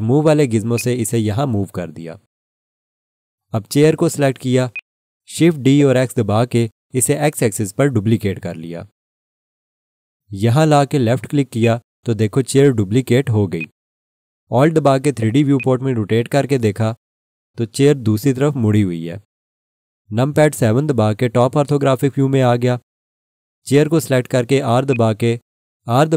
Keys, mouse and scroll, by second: 5.6 scroll down 1, 6.7 shift+d, 7.1 x, 11.6 click, 13.5 alt+click, 15.0 scroll down 1, 15.6 alt+click, 21.1 7, 24.9 click, 25.6 r.